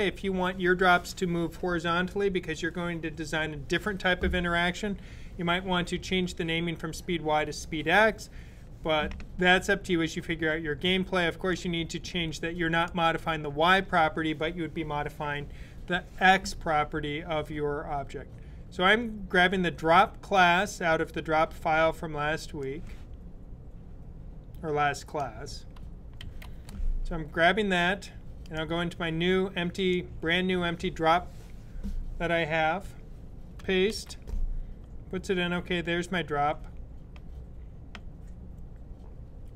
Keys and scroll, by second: 26.0 super+c, 33.7 super+v.